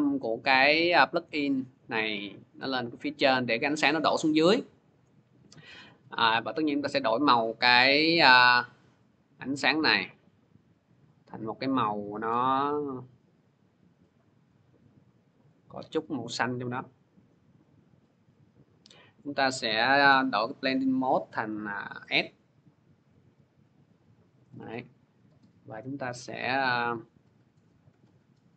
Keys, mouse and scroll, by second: 3.0-6.1 drag, 8.0 click, 8.9 click, 9.7 click, 11.5 click, 13.0 click, 15.3 click, 19.1 click, 19.9 F4, 21.4 click, 22.5 click, 26.3 click.